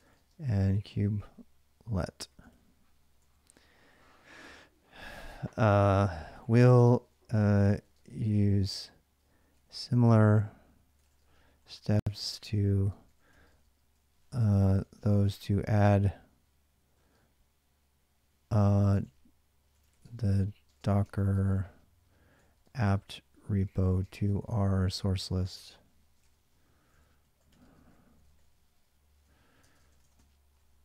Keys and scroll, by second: 0.0-3.8 typing, 5.6-16.1 typing, 18.6-30.8 typing, 29.1 ctrl+[.